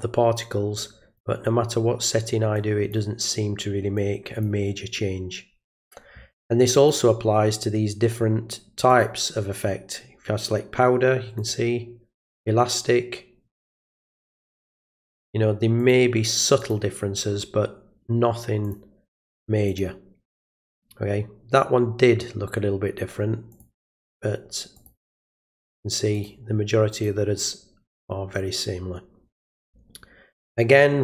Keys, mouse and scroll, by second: 0.8-1.2 drag, 2.6-2.9 drag, 4.0-4.4 drag, 6.7 click, 8.9 click, 11.4 click, 12.2 click, 13.6 click, 14.4 click, 15.8 click, 16.6 click, 18.6 click, 19.7 click, 23.5 click, 24.8 click, 26.1 click, 26.9 click.